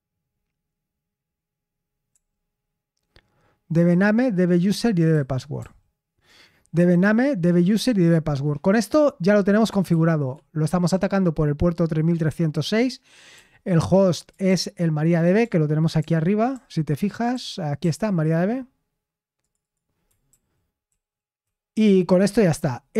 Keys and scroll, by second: 2.1 ctrl+u, 5.1 ctrl+d, 5.5 ctrl+d, 9.8-10.3 typing, 13.3 typing, 14.4 ctrl+u, 15.9 ctrl+u, 16.5 ctrl+u, 17.2 ctrl+u, 17.7 ctrl+d, 20.2 ctrl+d, 20.8 ctrl+d, 21.4 ctrl+d.